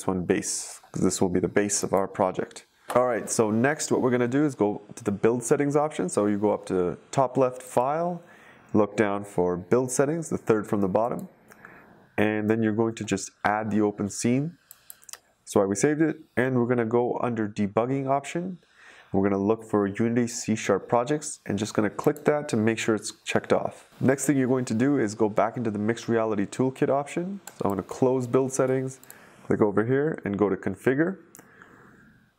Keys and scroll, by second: 0.0-0.8 typing.